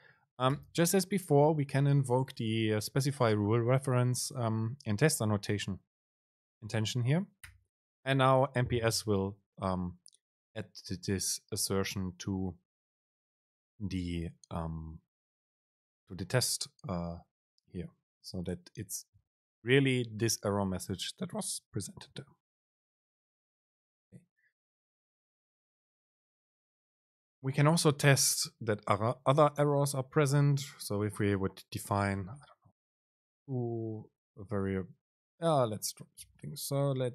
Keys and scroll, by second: 30.5 Return, 35.9 shift+Right, 36.4 BackSpace.